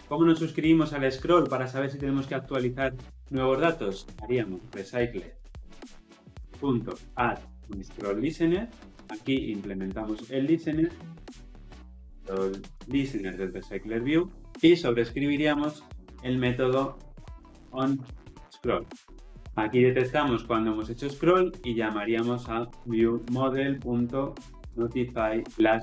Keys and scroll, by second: 8.8 Return, 13.2 Return, 13.9 Return, 14.4 ctrl+z, 15.6 ctrl+o, 17.2 Down.